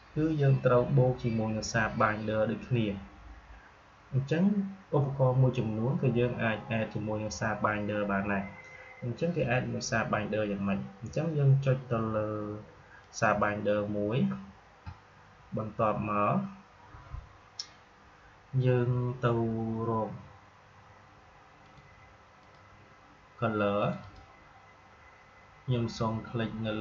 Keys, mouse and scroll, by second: 12.9 click, 21.6 click.